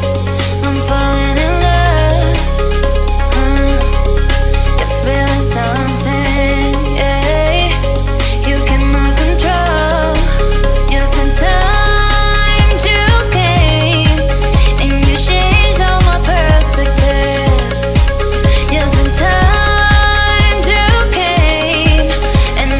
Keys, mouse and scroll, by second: 0.6 click, 0.7 space, 1.0-1.4 scroll down 1, 1.5 shift+click, 2.8 shift+click, 3.6-4.5 scroll up 1, 4.9 m, 5.4 click, 5.4 click, 6.6 Left, 6.9 scroll down 1, 7.6 middle click, 9.8 click, 9.9 space, 10.2 middle click, 11.3 scroll down 1, 11.5 middle click, 12.0 scroll up 1, 13.4 m, 14.0 ctrl+click, 14.2-15.6 scroll down 1, 16.3 Right, 17.1 click, 17.1 click, 17.2 space, 17.3-17.8 scroll down 2, 18.1 shift+middle click, 19.0-19.3 scroll up 1, 19.6 shift+middle click, 20.2 click, 21.2 scroll up 1, 21.6 shift+middle click, 22.5 f.